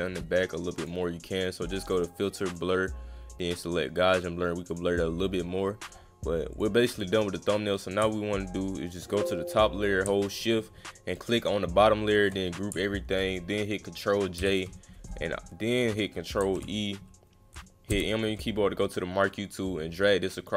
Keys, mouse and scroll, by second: 0.8 click, 2.5 click, 4.7 click, 6.5 click, 7.4 click, 11.1 shift+click, 12.2 shift+click, 15.5 ctrl+drag, 16.4 ctrl+e, 19.3-20.5 drag.